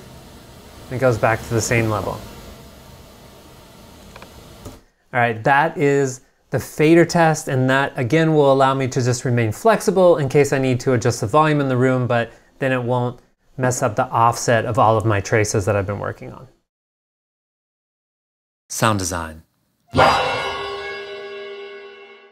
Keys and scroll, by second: 4.7 g.